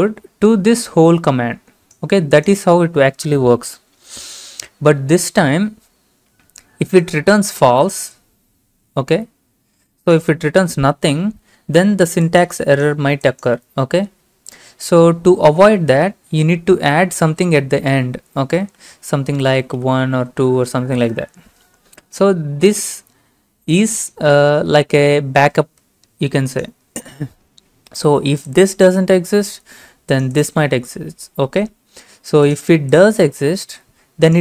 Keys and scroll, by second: 16.1 Right, 16.6 Right, 16.7-17.2 Right, 19.5-20.4 typing.